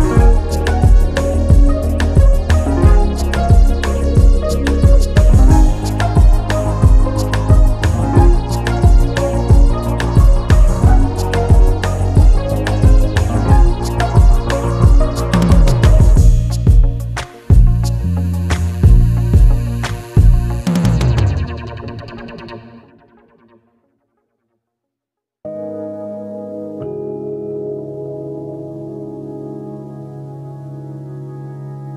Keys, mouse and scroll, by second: 0.7 click, 1.0 scroll down 1, 1.2 g, 2.1 scroll down 4, 2.3 click, 2.9 click, 3.1 Tab, 3.3 scroll down 1, 3.5 Tab, 3.6 scroll up 2, 3.7-4.1 scroll down 1, 4.1 ctrl+s, 7.7 scroll down 4, 7.8-8.4 scroll up 3, 8.7 click, 9.2 scroll down 2, 9.6 shift+a, 10.7 s, 11.2-11.7 scroll up 6, 11.7 g, 12.7-13.2 scroll down 1, 13.2 click, 13.8 click, 14.5 h, 14.6-15.0 scroll up 1, 15.0 click, 15.5 scroll up 3, 15.8 click, 16.2 right click, 16.6 scroll up 1, 17.2 drag, 17.6-18.0 drag, 18.1-18.6 scroll down 3, 18.6 click, 18.9 scroll up 3, 19.1 click, 19.9 s, 20.4 s, 21.1 s, 21.9 click, 22.1-22.7 scroll up 11, 22.7 click, 23.4 scroll down 7, 23.6 s, 24.3 scroll down 6, 24.5 scroll up 2, 24.7 drag, 24.8 Tab, 24.9 click, 25.4 i, 26.4 g, 27.6 i, 28.2 e, 28.5 scroll down 2, 28.7 e, 29.3 g, 30.2 ctrl+z, 30.6 g, 31.3-31.7 scroll down 7, 31.7 click.